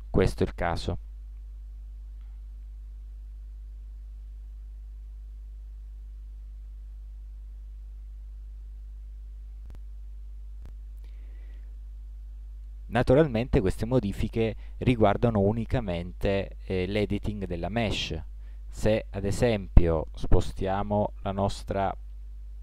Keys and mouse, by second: 13.7-15.5 drag, 21.5-22.6 drag.